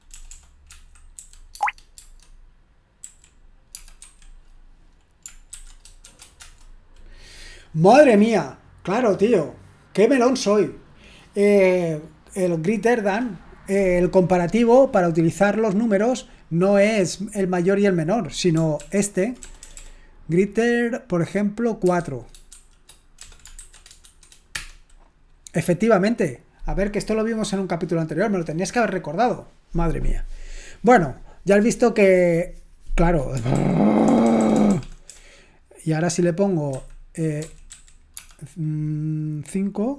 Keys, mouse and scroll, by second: 0.7-1.2 typing, 1.6 Tab, 2.0 Tab, 3.0-4.2 typing, 6.4 Return, 6.4 typing, 18.8 ctrl+p, 19.4 BackSpace, 19.7 BackSpace, 19.8 BackSpace, 23.8-24.6 typing, 33.6 ctrl+p, 34.1 BackSpace, 34.3 BackSpace, 34.4 BackSpace, 34.6 BackSpace.